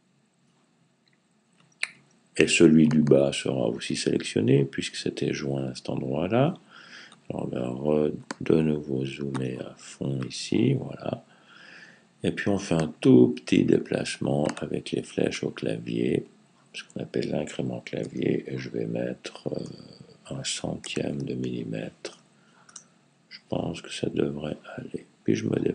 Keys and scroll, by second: 17.8 typing, 19.5 typing, 20.6 typing, 24.5 Left, 25.0 Left.